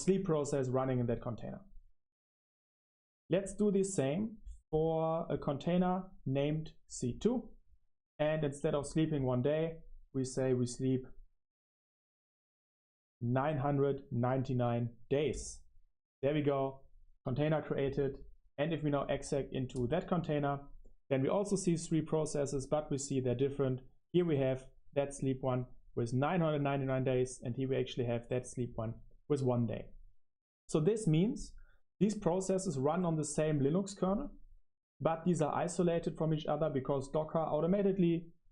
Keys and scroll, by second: 7.2 Up, 7.5 Up, 8.0-14.8 typing, 16.0 d, 17.5 Return, 20.3 Caps_Lock, 20.4 Page_Up, 21.1 Escape, 21.2-22.5 typing, 23.0 Return.